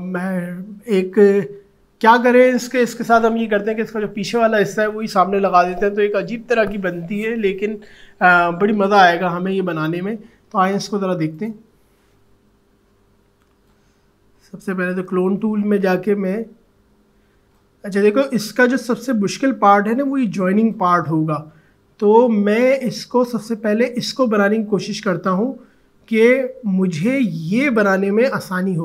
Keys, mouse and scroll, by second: 11.3 click, 16.4 click, 21.3 alt+scroll up 1, 25.5-26.4 alt+scroll up 1, 27.7 alt+click.